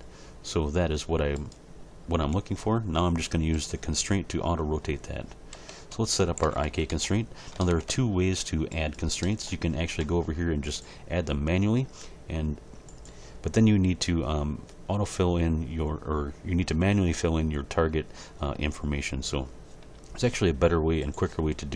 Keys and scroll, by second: 2.3 g, 5.5 a, 6.2 alt+r, 6.4 alt+g, 6.6 alt+s.